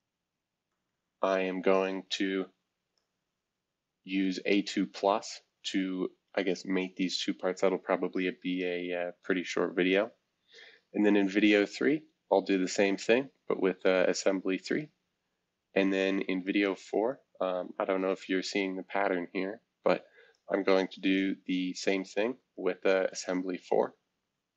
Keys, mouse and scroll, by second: 0.0 click, 0.7 click, 2.9-5.1 drag, 5.5 click, 9.5 click, 10.5 click, 11.8-13.5 drag, 13.6 click, 14.4 click, 16.4 click, 17.1 click, 17.8 click, 20.3-22.4 drag, 22.6 click.